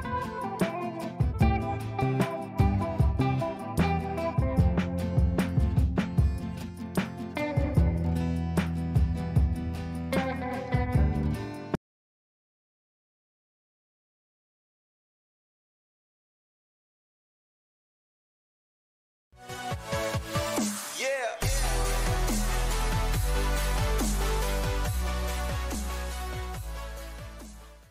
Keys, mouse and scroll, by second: 0.4 right click, 1.1 click.